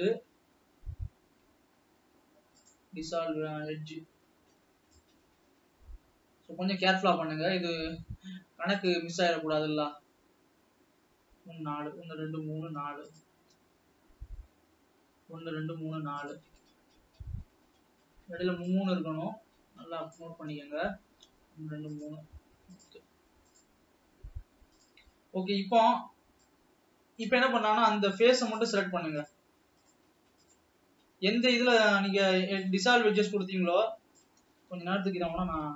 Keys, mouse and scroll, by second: 2.0 x, 5.1 click, 10.0 click, 14.1 shift+click, 16.3 shift+click, 18.8 click, 22.7 shift+click, 25.6 scroll up 1, 26.6 click, 28.9 click, 29.3-30.9 drag, 32.0 scroll down 1, 33.0 click.